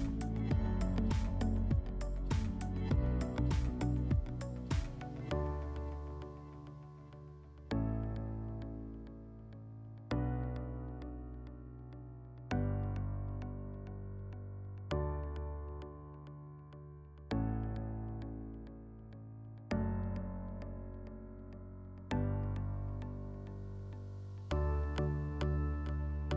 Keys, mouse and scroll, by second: 0.5 middle click, 0.6-1.0 scroll, 2.0 click, 3.0 click, 4.0 click, 4.1 click, 5.0-6.1 typing, 6.3 Tab, 7.1 Return, 9.3-9.7 drag, 11.1 click, 11.9 click, 12.0 click, 12.9-17.0 typing, 13.9 click, 17.6 click, 17.7-18.3 drag, 19.0 click, 20.8 click, 21.9 click, 23.7 middle click.